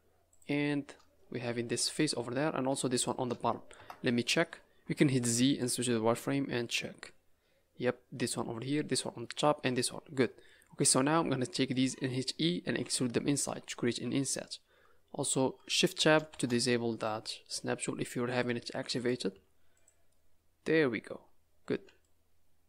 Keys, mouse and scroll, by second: 0.3 click, 1.1-1.5 scroll down 3, 1.9 middle click, 2.4 scroll up 1, 2.9 shift+click, 3.7 KP_0, 4.9 z, 5.9 scroll down 4, 6.5 scroll up 5, 8.1-9.1 scroll down 2, 10.4 middle click, 11.1-11.5 scroll up 3, 11.5 middle click, 12.8 e, 19.3 z, 20.1 middle click.